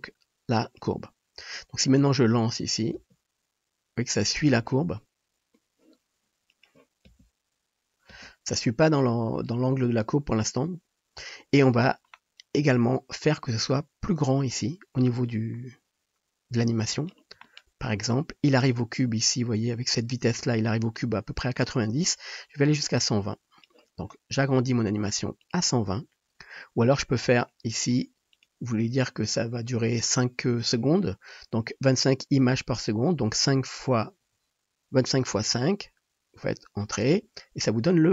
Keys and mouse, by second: 3.1 space, 4.7 space, 7.2 space, 8.2 space, 23.8-27.1 middle drag, 27.8-34.1 middle drag, 34.2-38.1 middle drag.